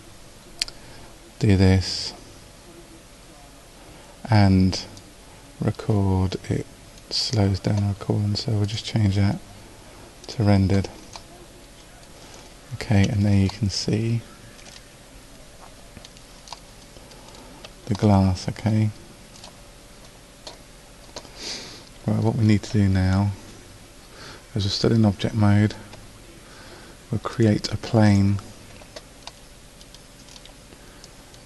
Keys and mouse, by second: 5.0-6.8 drag, 8.7-15.5 drag, 17.5-21.0 drag, 27.3 click, 29.5 click.